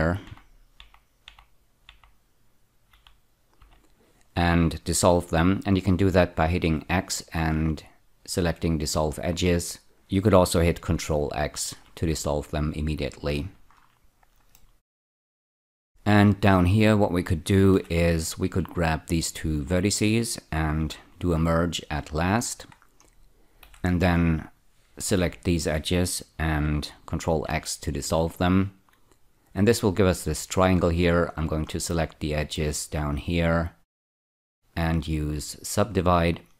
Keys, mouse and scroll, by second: 0.0-1.9 typing, 2.9 typing, 5.6 typing, 6.8 x, 9.9 right click, 11.7 ctrl+x, 13.2-14.6 scroll down 1, 14.6 middle click, 15.4 scroll up 3, 17.8 1, 18.4 click, 19.2 shift+click, 20.8 m, 22.0 click, 23.6 2, 24.4 click, 25.1 ä, 25.2 ä, 27.3 ctrl+x, 30.8 click, 31.9 middle click, 33.3 shift+click, 34.0 shift+click, 34.8 right click, 35.9 click.